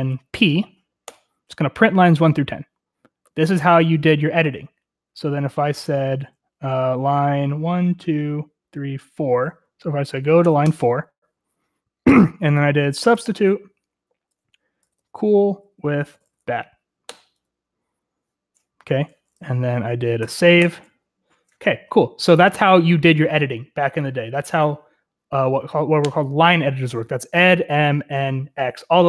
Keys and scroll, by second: 0.0-0.3 typing, 1.0 Return, 10.4 4, 10.6 Return, 12.7-16.7 typing, 17.0 Return, 20.2 w, 20.6 Return.